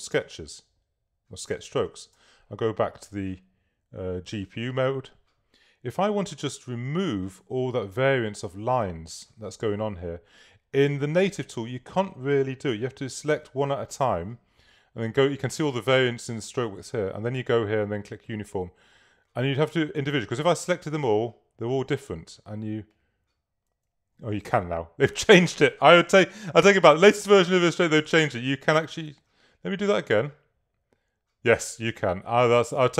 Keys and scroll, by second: 1.9 super+y, 20.3 super+a, 24.5 super+z, 28.3 super+z, 29.1 super+a.